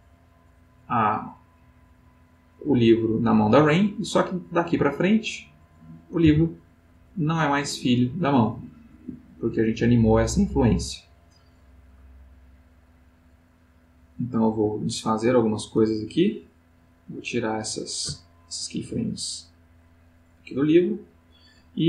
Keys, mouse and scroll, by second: 5.0 click, 6.2 g, 8.8 Escape, 11.3 click, 13.5 click, 17.4-18.1 drag, 18.8 Delete, 19.7-21.5 drag.